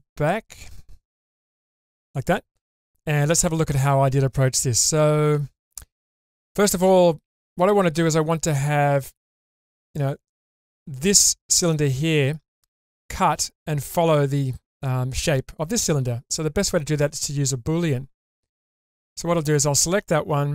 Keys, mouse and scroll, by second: 1.5 /, 5.0 Tab, 8.7-9.6 scroll up 2, 9.0-9.6 middle drag, 16.0-16.8 middle drag, 18.6-19.3 scroll down 3, 19.3 click.